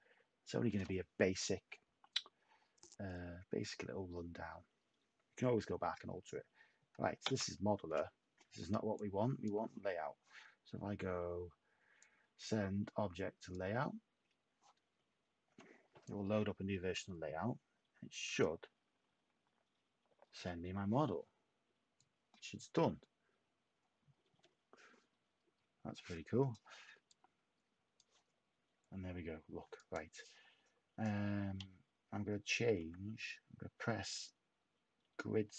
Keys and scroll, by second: 7.2 s, 32.8 [.